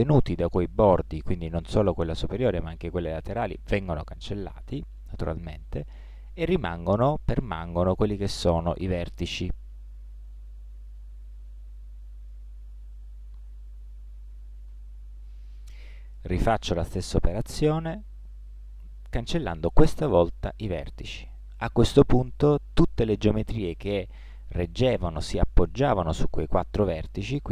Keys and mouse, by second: 2.6-4.2 middle drag, 10.3-13.5 right drag, 13.5 ctrl+z, 13.7 click, 14.0 ctrl+z, 14.2 ctrl+z, 14.3 ctrl+z, 14.8 ctrl+z, 16.9 x, 22.3-24.2 middle drag.